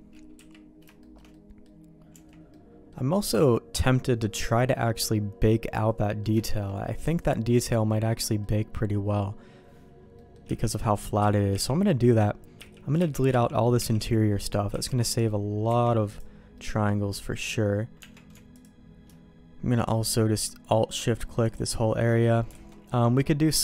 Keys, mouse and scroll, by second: 0.3 KP_3, 1.0 shift+middle click, 1.3 middle click, 2.1 Tab, 2.5 middle click, 6.0 middle click, 6.4 shift+middle click, 7.0 Tab, 8.4 middle click, 10.2 middle click, 10.5 l, 11.2 l, 11.5 l, 12.6-15.7 typing, 16.5 middle click, 17.2 middle click, 18.0 Tab, 18.5 alt+click, 21.4 alt+shift+click, 22.7 alt+a.